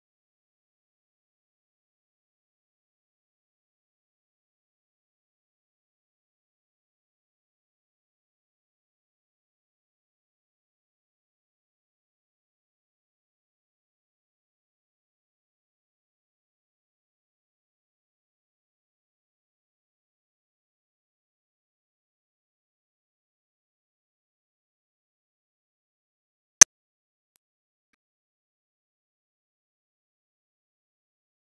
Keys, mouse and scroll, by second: 3.9 click, 4.3 KP_0, 5.2 click, 8.2-9.6 drag, 9.6 click, 10.4 click, 10.8 shift+a, 12.2 click, 13.0 click, 14.1 middle click, 14.3 click, 15.1 click, 16.2 click, 17.0 z, 17.9 click, 18.0 Tab, 18.8 click, 19.9 click, 20.8 scroll down 2, 20.9 middle click, 21.0 s, 23.0 g, 24.0 Tab, 24.6-27.4 drag, 29.2 click, 29.7-30.3 scroll up 10, 29.9 click, 29.9 n, 30.0 middle click, 30.3-31.0 middle drag, 31.0-31.4 drag.